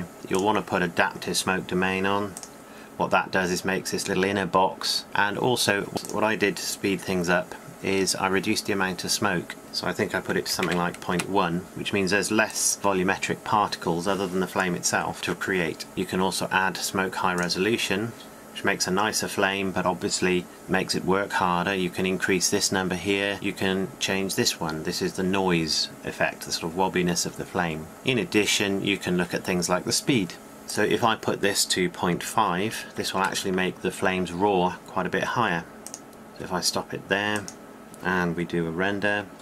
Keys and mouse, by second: 9.7-39.4 drag.